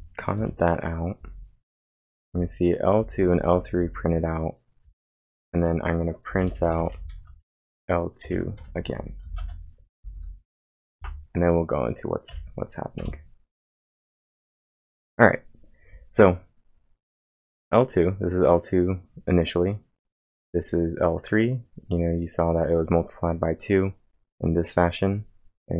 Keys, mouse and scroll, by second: 2.8-4.8 typing, 5.2 Return, 7.1-10.7 typing, 11.0 ctrl+`, 12.3 Up, 13.0 Return.